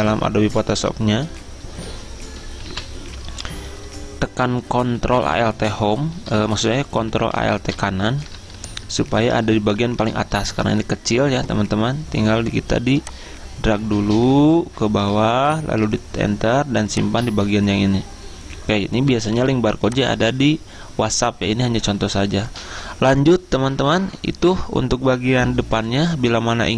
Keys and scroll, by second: 0.3 alt+Tab, 2.7 F10, 2.8 F10, 5.6 ctrl+shift+], 8.0 ctrl+shift+], 8.8 Return, 10.1 ctrl+shift+], 15.8 Return, 16.4 Return, 19.5 z.